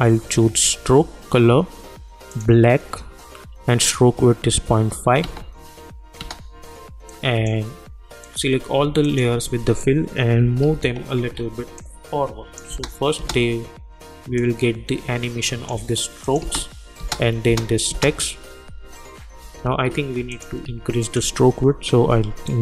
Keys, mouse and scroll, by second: 2.3 click, 5.2 space, 7.1 click, 9.0 shift+click, 10.4 =, 10.6 =, 11.8 click, 12.7 space, 14.4-16.2 drag, 16.4 space, 19.4 -, 19.6 -, 20.3 click, 21.0 shift+click, 22.4 click.